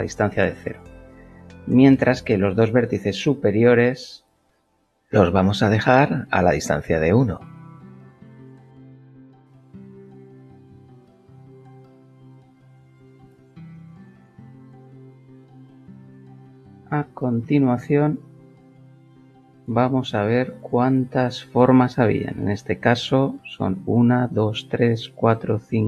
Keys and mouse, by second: 1.9 click, 2.7 shift+click, 3.1 shift+middle click, 3.8 shift+middle click, 5.5 shift+click, 6.1 KP_1, 6.7 Return, 7.2 shift+middle click, 10.7 a, 12.4 s, 13.2 x, 15.5 click, 19.4 Tab, 20.1 click.